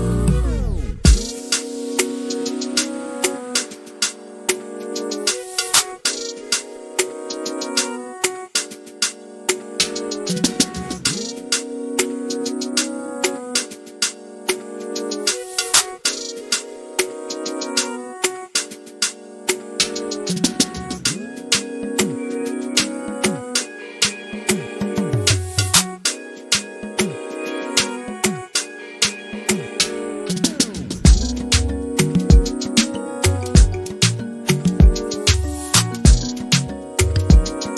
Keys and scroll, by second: 5.0 f, 8.9-12.5 typing, 16.6-20.7 typing, 22.7-24.0 typing, 32.9 m, 34.5 s, 36.7-37.4 typing.